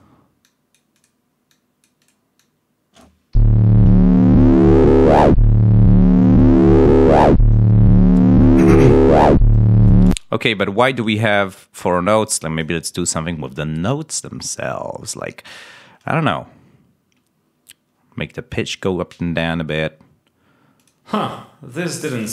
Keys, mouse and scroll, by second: 0.3 click, 1.4 click, 2.3 click, 3.2 l, 7.4-8.7 drag, 9.4 click, 10.0 space, 11.8 click, 20.7 click, 21.6 click.